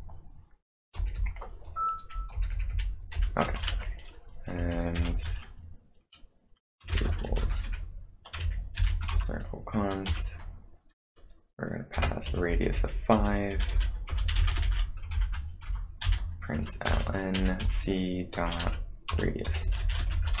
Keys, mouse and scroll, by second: 1.6-5.1 typing, 6.7-8.1 typing, 8.8 ctrl+n, 9.1 Return, 10.1 shift+(, 11.7-20.4 typing, 19.1 Return.